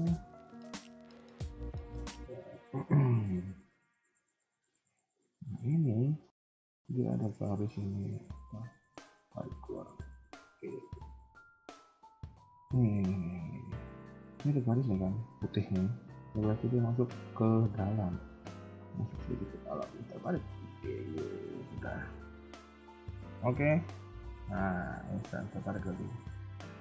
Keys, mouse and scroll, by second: 0.4 middle click, 0.4 KP_1, 0.9 middle click, 1.6-2.0 scroll up 2, 2.1 click, 2.3 KP_3, 3.3 shift+middle click, 3.6-3.9 scroll up 2, 4.0 middle click, 5.5 KP_3, 6.1 scroll up 2, 7.0 click, 9.1 g, 12.8 scroll up 2, 13.2 shift+middle click, 13.4-13.8 scroll up 2, 13.7 a, 13.8 a, 15.7 scroll down 2, 16.7 click, 17.2 scroll down 3, 17.5 shift+middle click, 17.8 scroll up 2, 18.9 g, 21.1-21.5 scroll down 3, 21.5 shift+middle click, 21.8-22.8 scroll down 4, 22.4 KP_1, 22.8 KP_3, 23.4 shift+middle click, 23.7-24.3 scroll up 2, 24.2 a, 24.3 a, 24.6 b, 25.4 shift+middle click, 25.6-26.2 scroll up 2, 26.2-26.8 scroll down 5.